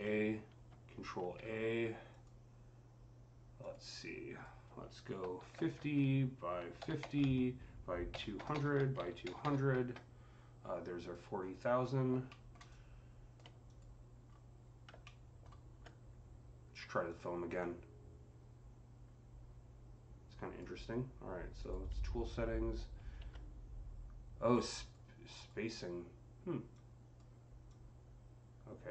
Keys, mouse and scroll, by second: 1.1 ctrl+a, 1.9 click, 3.5 click, 3.8-5.6 drag, 5.1 KP_5, 5.4 KP_0, 5.6 Tab, 6.7 KP_5, 6.7 KP_0, 7.0 Tab, 7.9-9.3 typing, 8.6 Tab, 9.6 KP_Enter, 10.8 click, 11.3 scroll down 4, 12.1 alt+middle click, 12.5 alt+click, 12.6-14.1 alt+drag, 14.1-14.7 scroll up 5, 14.9-16.9 alt+middle drag, 15.6 alt+scroll down 2, 16.9 click, 17.4-24.3 drag, 22.8 ctrl+z, 24.3-26.5 drag, 25.2 typing, 26.5-28.9 drag.